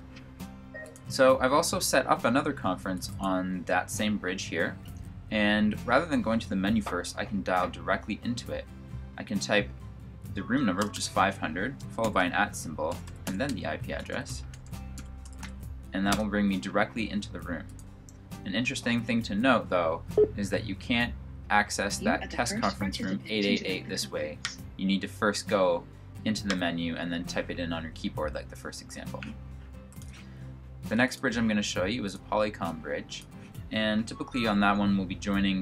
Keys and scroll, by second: 10.3-10.8 typing, 11.9-15.3 typing.